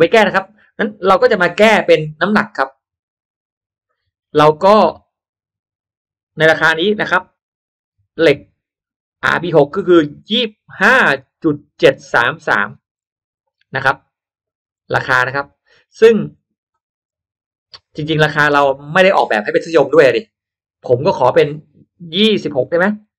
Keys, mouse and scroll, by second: 3.8 click, 14.6 click, 22.0 2.